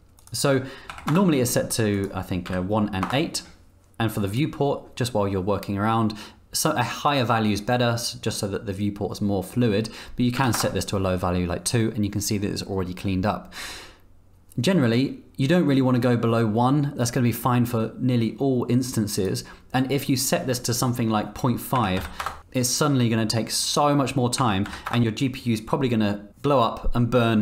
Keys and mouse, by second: 0.2-1.7 drag, 1.9-3.9 drag, 4.4-12.2 drag, 19.2-22.2 drag, 22.2 KP_Enter, 23.7-27.4 drag.